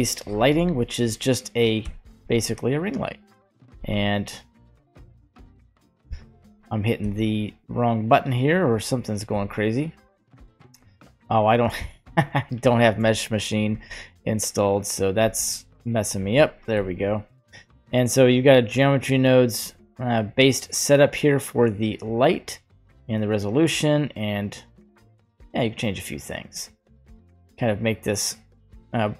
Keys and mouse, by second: 1.9 g, 2.2 z, 3.8 z, 5.1 z, 6.1 z, 7.1 z, 9.3 z, 11.5 shift+middle click, 12.9 shift+middle click, 15.0 click, 15.6 right click, 15.6 click, 16.4 g, 20.5-23.0 drag, 23.5-26.6 drag, 27.1-29.1 drag.